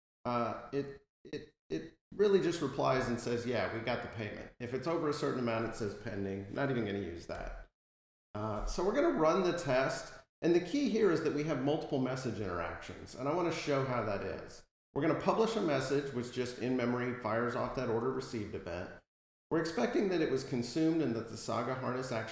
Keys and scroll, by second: 0.9 F12, 7.1 super+-.